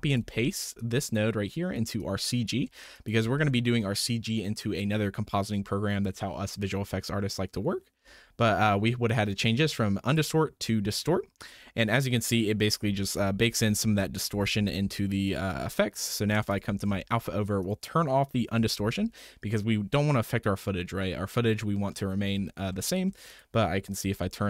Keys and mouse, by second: 0.3 ctrl+v, 0.7-1.7 drag, 0.7 typing, 2.0 click, 2.9 ctrl+shift+click, 10.1-11.0 drag, 11.4 middle click, 13.0 m, 13.4 m, 13.8 m, 14.3 m, 16.5 ctrl+shift+click, 17.6 click, 18.6 m, 22.7 shift+drag, 23.3 click, 24.1 m.